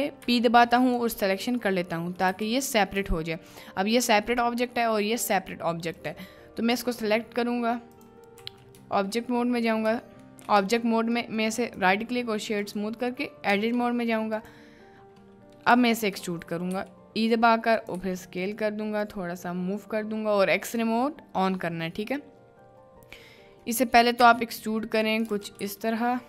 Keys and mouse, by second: 6.7 b, 10.6 b, 11.6-12.7 right drag, 13.5 b, 25.5 ctrl+z.